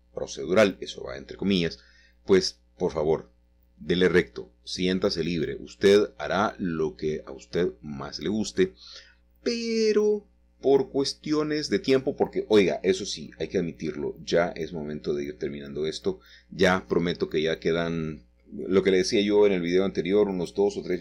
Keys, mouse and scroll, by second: 0.0-1.7 scroll down 3, 1.7 scroll down 1, 2.4 typing, 4.8 click, 5.8 typing, 7.2-8.3 scroll down 2, 9.2-18.4 drag, 18.9 click, 20.0 click.